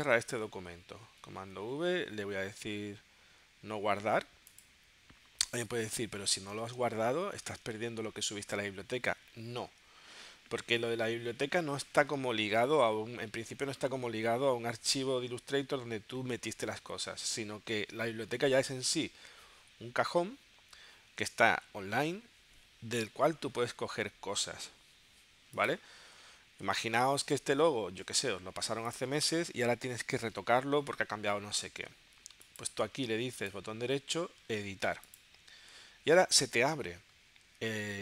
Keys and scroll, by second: 1.1 super+w, 6.8 super+Tab, 26.8 space.